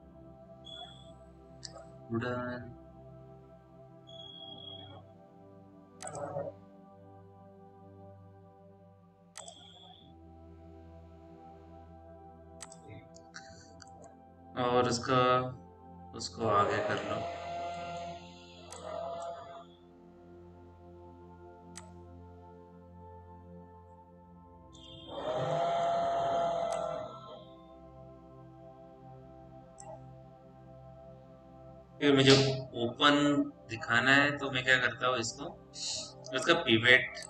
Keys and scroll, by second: 15.2-16.1 typing, 23.3 p.